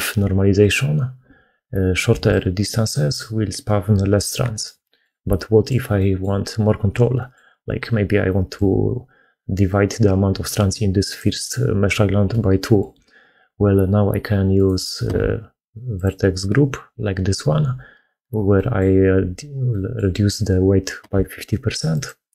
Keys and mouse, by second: 1.9-5.0 d, 4.5 click, 4.6 right click, 5.2 click, 5.2 right click, 5.2 d, 5.8 click, 5.8 right click, 7.0 click, 7.0 right click, 8.3-12.7 d, 12.2 click, 14.4 click, 14.4 d, 14.9 Tab, 18.4 click, 19.5 middle click, 20.8 Tab.